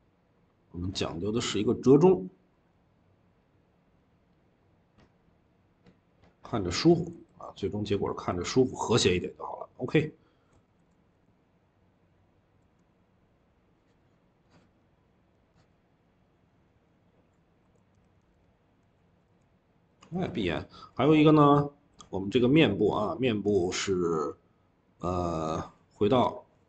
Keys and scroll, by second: 7.5-8.3 typing, 16.6 Escape, 17.5 ctrl+s, 18.2 Escape, 18.9 typing, 20.3 typing.